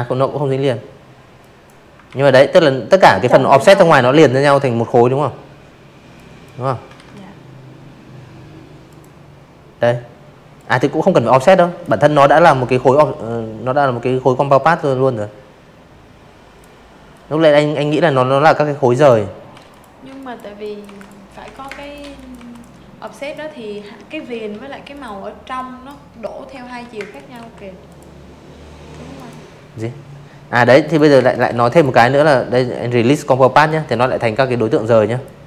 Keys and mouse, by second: 3.1 drag, 3.8 ctrl+z, 5.8 click, 7.5-8.7 drag, 9.8-13.4 drag, 14.0-15.9 drag, 16.4-19.2 typing, 16.6 click, 17.1 click, 17.5 click, 17.8 click, 18.4 click, 18.7 click, 19.0 click, 19.4 click, 19.9 click, 21.2 ctrl+z, 21.8 click, 22.5 drag, 23.5 ctrl+z, 23.9 space, 24.0 click, 24.3 v, 24.8 click, 26.1 right click, 27.8 click, 28.1 space, 28.1 click, 28.5 v, 28.6 click, 28.9 right click, 30.1 click, 30.8 click, 31.3 click, 32.8 click, 33.2 click.